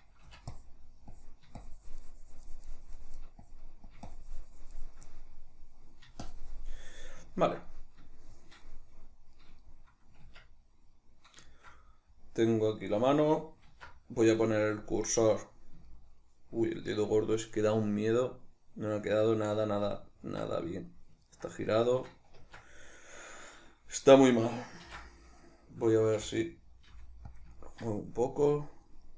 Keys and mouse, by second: 0.3 c, 0.5-5.1 drag, 5.1-6.2 middle drag, 6.2 shift+click, 7.0-14.8 middle drag, 10.2 Tab, 13.7 alt+q, 14.8 click, 15.9-27.4 shift+middle drag, 22.4 Tab, 25.3 ctrl+d, 26.2 g, 27.4 click, 27.6 ctrl+middle click, 28.5 click, 29.0 middle click.